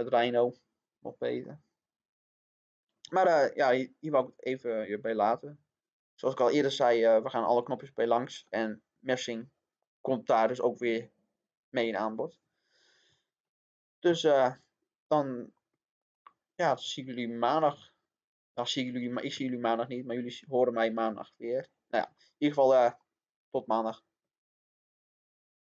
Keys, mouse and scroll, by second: 3.2 scroll down 1, 3.4-5.6 middle drag, 9.8 click, 14.0-15.6 middle drag.